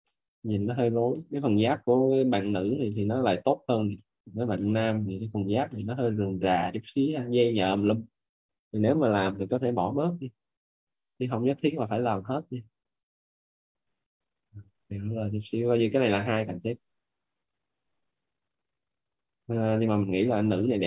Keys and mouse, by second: 11.8 click, 15.3 click, 18.6 click.